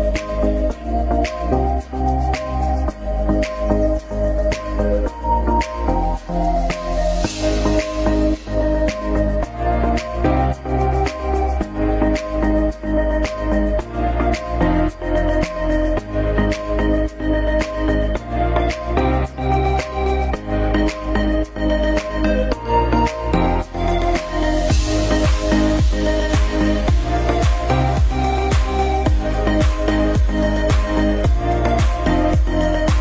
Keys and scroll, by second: 1.5 Delete, 4.6 shift+F2, 5.0 shift+Page_Up, 5.6 F3, 6.1 Escape, 9.8 c, 10.1 Escape, 12.0 ctrl+z, 14.2 F2, 18.4 shift+Page_Up, 19.2 Escape.